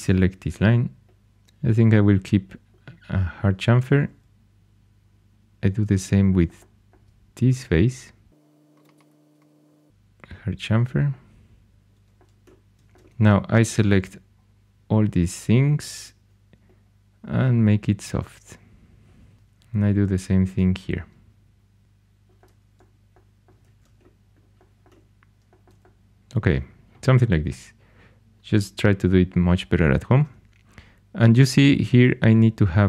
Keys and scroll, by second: 1.2 shift+super+e, 12.8 2, 19.3 shift+super+e, 23.6 shift+super+e.